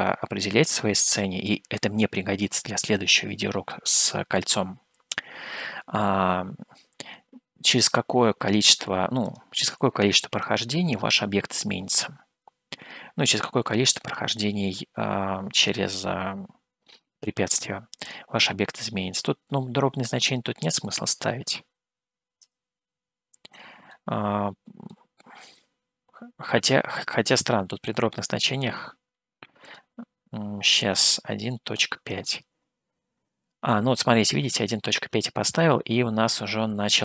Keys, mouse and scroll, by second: 4.1-5.7 middle drag, 9.2-11.9 drag, 20.8-23.6 drag, 24.1-25.2 middle drag, 29.6-34.2 drag.